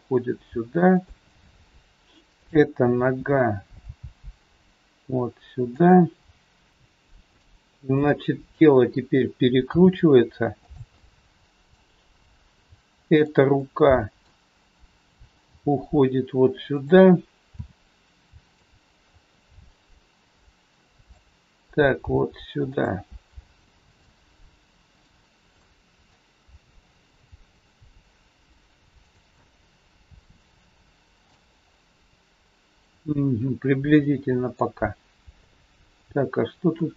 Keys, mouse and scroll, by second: 2.4 click, 3.8 g, 6.7 shift+middle click, 6.7 scroll up 3, 7.2 click, 7.9 middle click, 9.6 r, 11.0 middle click, 13.1 click, 13.5 scroll up 1, 13.6 middle click, 14.6 middle click, 15.5 g, 17.6 r, 19.2 middle click, 22.1 g, 23.1 middle click, 24.8 click, 25.6 middle click, 27.1 r, 29.4 middle click, 31.6 scroll up 1, 31.7 middle click, 35.1-35.5 scroll down 2, 35.5 middle click.